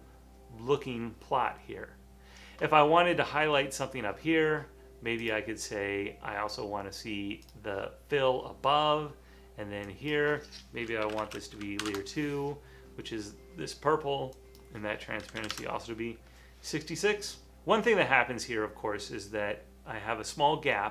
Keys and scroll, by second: 10.9-11.9 typing, 15.4 typing.